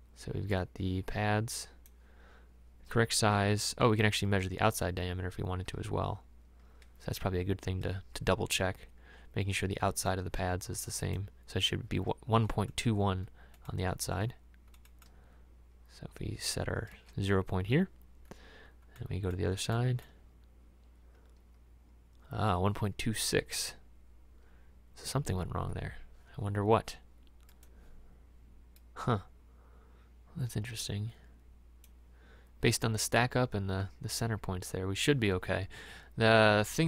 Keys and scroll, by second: 16.9 space.